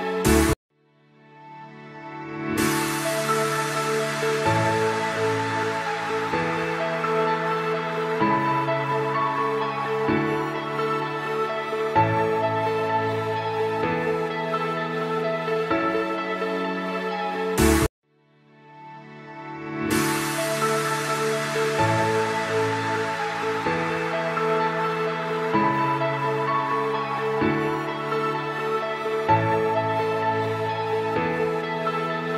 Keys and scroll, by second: 1.4 shift+F2, 1.9 Escape, 2.3 F2, 5.3 ctrl+z, 7.0 F3, 10.4 F3, 14.2 shift+F2, 17.9 F3, 22.6 shift+F2, 23.2 r, 23.6 F3, 26.2 Escape, 29.9 Escape, 32.1 F2.